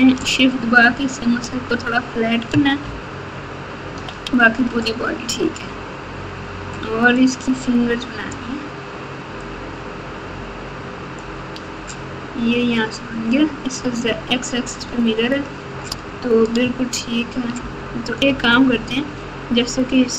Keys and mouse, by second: 2.8 ctrl+KP_8, 3.3-4.0 ctrl+KP_8, 7.1-8.3 shift+drag, 9.4-11.2 shift+drag, 18.3 Tab.